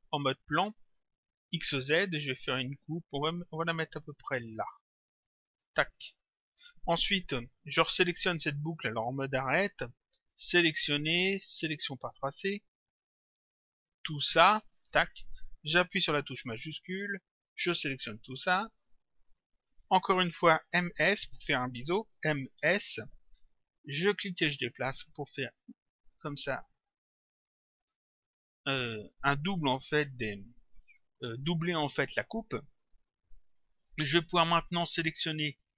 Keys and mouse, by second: 5.5 click, 9.2 click, 11.8 click, 13.1 click, 17.5 shift+click, 22.2 m, 22.6 s, 24.2 click, 33.8 click.